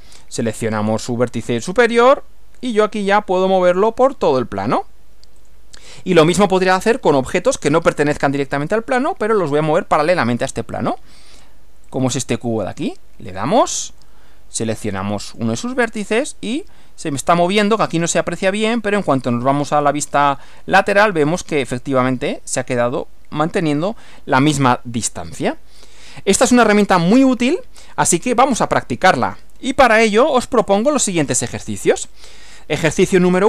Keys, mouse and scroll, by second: 2.0 click, 5.4 click, 12.0 click, 13.3 click, 15.3 click, 18.0 click, 18.7-21.5 middle drag, 24.4-25.5 middle drag, 25.8 scroll down 2, 27.2 click, 30.6 click.